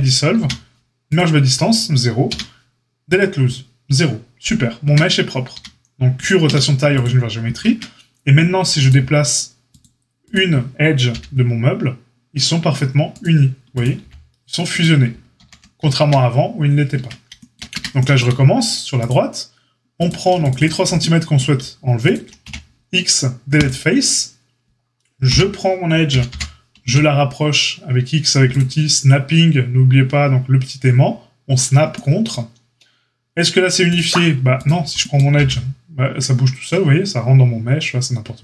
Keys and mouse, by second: 0.3 q, 2.2 q, 4.8 Tab, 5.5 q, 6.4 q, 7.6 Tab, 8.8-10.3 drag, 10.3-13.7 middle drag, 11.1 g, 13.7 click, 13.8-19.0 middle drag, 14.0 g, 15.3 ctrl+z, 16.9 Tab, 17.7 Tab, 19.0-20.0 drag, 20.0 alt+shift+middle click, 20.4 alt+shift+click, 20.4 alt+shift+middle click, 20.5 alt+shift+click, 20.6-33.9 alt+shift+middle drag, 22.4 x, 25.2 l, 26.0 g, 33.9 click, 34.6-38.4 middle drag, 35.3 g.